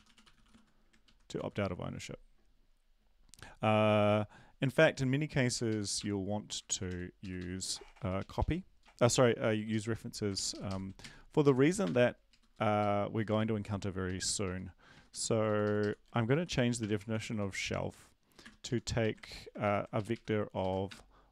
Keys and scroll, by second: 0.1 ctrl+shift+Right, 0.3 ctrl+shift+Right, 0.5 ctrl+shift+Right, 1.0 typing, 5.4 Up, 5.9 Up, 5.9 BackSpace, 7.2 Down, 7.2 Up, 7.4 Up, 7.9 Up, 9.1 Up, 9.1 End, 9.5 Left, 9.7 Left, 10.3 ctrl+shift+Left, 10.5 ctrl+shift+Left, 10.6 ctrl+shift+Left, 11.0 shift+Right, 15.5 Right, 15.5 ctrl+Left, 15.6 ctrl+Left, 15.8 ctrl+Left, 16.3-17.9 typing, 19.2 Right, 19.2 typing, 19.9 shift+Right, 20.1 shift+Right, 20.6 shift+Right, 20.9 BackSpace.